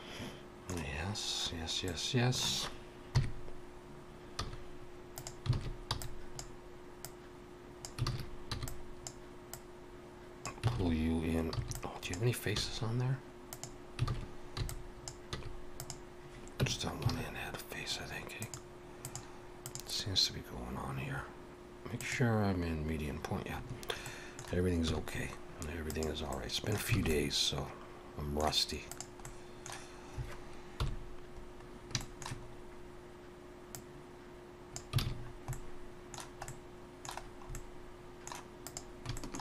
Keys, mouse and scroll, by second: 3.1 KP_3, 4.4 z, 5.5 alt+a, 5.9 b, 7.0 click, 8.1 alt+a, 8.5 b, 9.5 click, 10.7 alt+a, 11.5 b, 12.6 x, 14.1 alt+a, 14.6 b, 15.3 x, 16.6 Tab, 18.4 click, 22.0 click, 24.0 middle click, 24.9 z, 26.3 middle click, 26.9 alt+a, 27.1 middle click, 28.9 click, 29.2 middle click, 30.8 KP_7, 31.6 scroll up 1, 32.0 shift+middle click, 32.5 scroll up 1, 33.7 click, 35.0 alt+a, 35.2-35.5 scroll down 3, 35.5 middle click, 36.5 middle click, 37.2 scroll down 1, 37.5 middle click, 38.6 click, 39.1 shift+middle click.